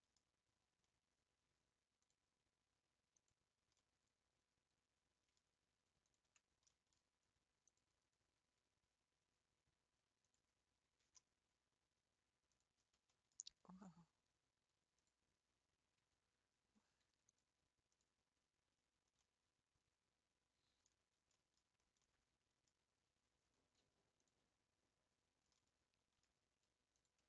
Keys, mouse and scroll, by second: 0.4-0.8 scroll down 1, 0.8-2.0 middle drag, 2.0 click, 3.1 click, 3.9-6.0 middle drag, 6.0 ctrl+click, 6.8 middle click, 7.6 click, 8.3 r, 12.6 click, 13.1-13.8 shift+middle drag, 13.8 Tab, 14.2 scroll down 1, 15.0 Tab, 15.1 click, 16.2 Tab, 17.9 click, 18.7 Tab, 19.2-20.9 middle drag, 20.9-22.1 scroll up 5, 21.4 shift+middle click, 22.2-23.5 middle drag, 23.5 1, 24.2 click, 25.5-26.9 middle drag, 26.9 shift+click.